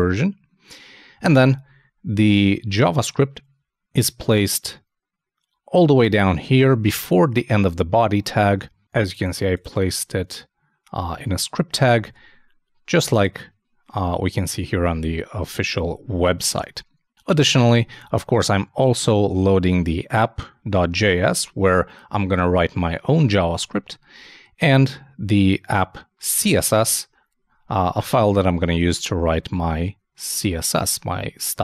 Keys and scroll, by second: 12.0 super+Tab, 15.6 super+Tab.